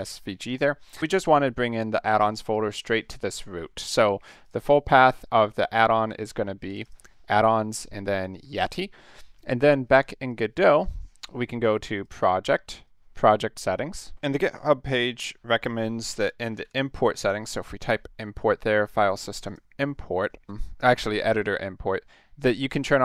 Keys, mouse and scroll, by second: 0.5 click, 3.4 click, 4.4 click, 6.7 click, 6.8 click, 10.3 click, 11.9 click, 12.4 click, 12.8 click, 15.7-17.1 typing, 19.4 click, 20.8 click.